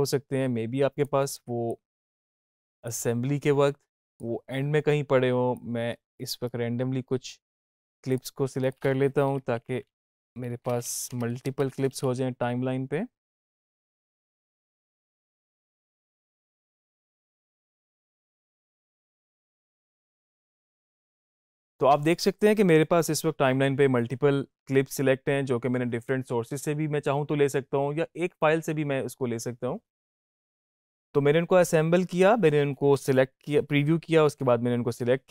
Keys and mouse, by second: 9.4 shift+Right, 10.9 i, 11.5 shift+Right, 14.0 o, 14.2 click, 15.1 shift+Right, 15.6 shift+Right, 18.4 Left, 18.5 o, 18.8 Right, 19.0 o, 19.2 click, 20.4 click.